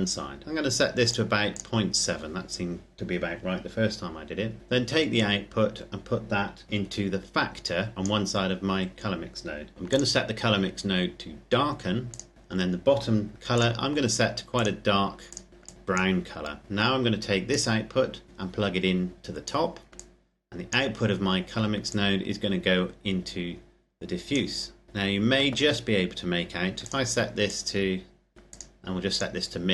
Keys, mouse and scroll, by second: 0.9 click, 4.8 click, 13.3 click, 17.3 click, 24.8-26.5 scroll down 1, 26.5 click.